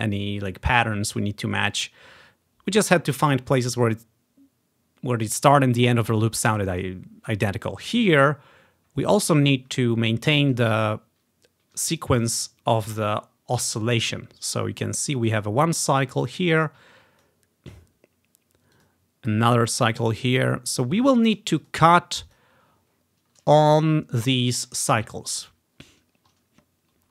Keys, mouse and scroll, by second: 8.0 ctrl+scroll up 1, 8.9 ctrl+scroll up 1, 9.8 ctrl+scroll down 1, 11.2-13.5 scroll down 1, 15.1-17.3 drag, 18.8 click, 19.3-24.1 drag, 26.4-27.1 ctrl+scroll down 3.